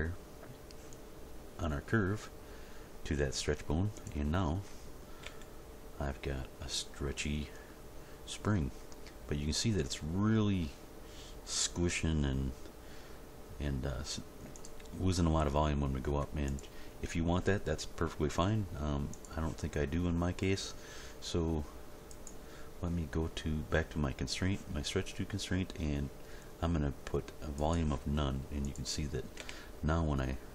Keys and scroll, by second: 5.2 g, 29.4 g.